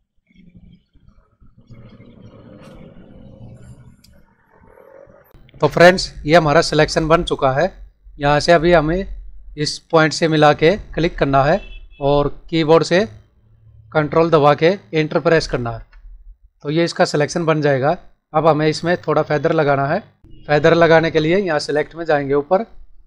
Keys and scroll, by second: 15.7 ctrl+Return.